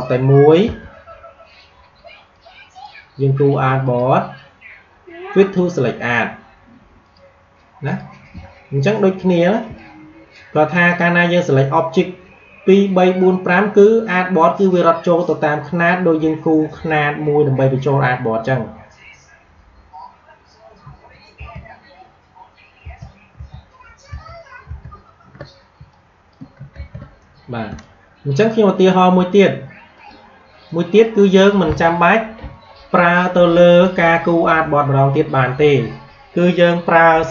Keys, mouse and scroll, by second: 0.5 shift+o, 2.2-8.5 drag, 9.5 space, 9.9 click, 10.0 space, 20.7 ctrl+Num_Lock, 21.3 ctrl+z, 25.6 space, 25.8 click, 26.1 space, 26.6 ctrl+z, 27.5 space, 27.7 click, 28.0 space, 29.8 click.